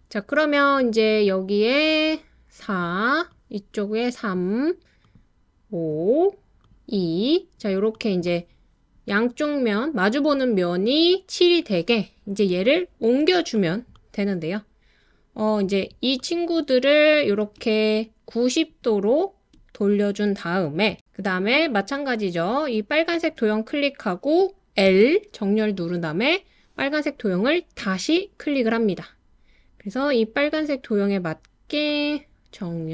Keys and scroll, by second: 24.9 l.